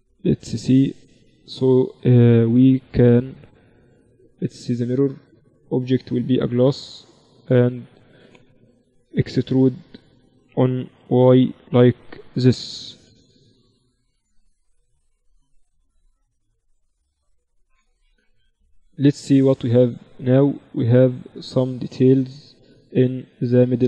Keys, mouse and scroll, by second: 0.1 z, 0.3 z, 1.4 z, 4.5-7.3 drag, 9.0 Tab, 9.2 a, 10.8 e, 12.6 z, 14.4 Tab, 14.8 Tab, 16.1 click, 17.2 Tab, 18.3 KP_1, 18.6 z, 21.0-23.8 middle drag.